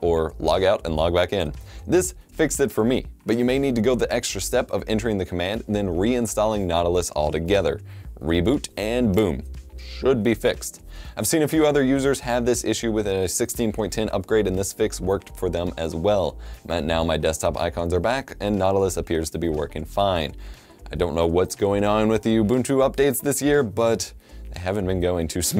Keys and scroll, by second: 0.5 F1, 0.6-2.0 typing, 3.8-8.8 typing, 9.8 BackSpace, 10.3 End, 11.2-15.3 typing.